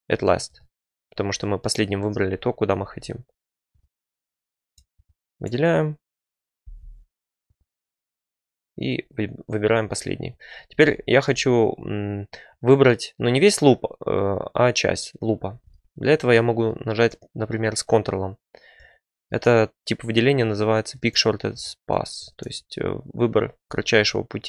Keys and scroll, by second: 15.4 2.